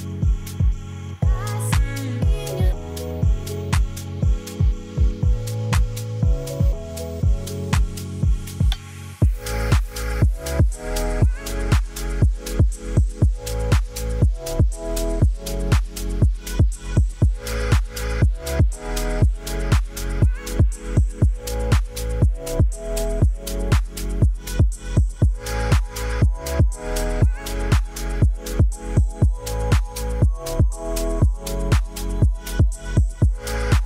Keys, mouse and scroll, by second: 0.9-1.4 shift+middle drag, 3.6 shift+middle drag, 5.7 shift+a, 7.6 g, 7.7 z, 8.5 middle drag, 8.6 click, 9.0 middle click, 9.7 middle drag, 10.1 KP_0, 11.2 click, 13.6 click, 18.4 g, 18.8 y, 20.4 click, 21.0 g, 21.1 y, 27.8-30.6 drag.